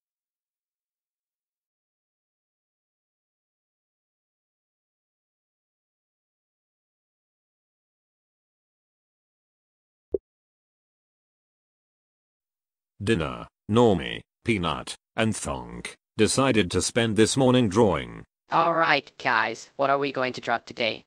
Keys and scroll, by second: 8.9 Escape, 10.2-14.1 typing.